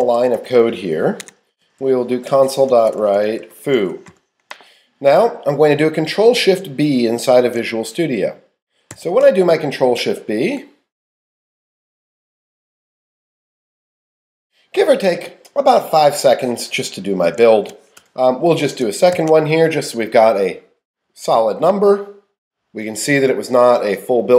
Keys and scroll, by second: 0.0-5.1 typing, 1.2 Tab, 17.5 shift+Up.